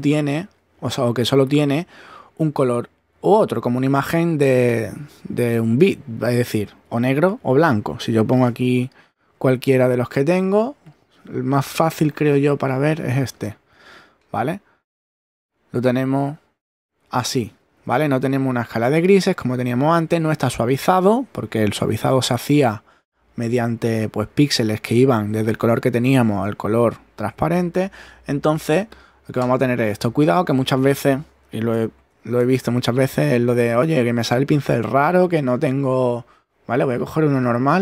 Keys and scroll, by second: 17.0 super+z, 17.5 super+<, 20.1 super+z, 30.2 super+z, 31.7 super+BackSpace.